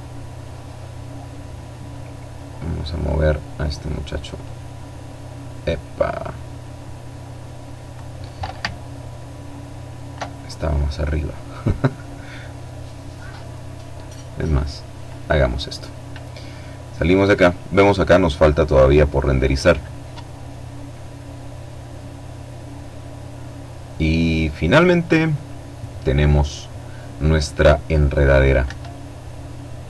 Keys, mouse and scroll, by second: 0.6-2.2 drag, 3.1-7.0 drag, 7.4-9.1 alt+drag, 9.1-9.6 alt+scroll up 3, 9.6-10.3 scroll down 2, 13.0-14.2 drag, 27.2 Escape, 28.5 right click.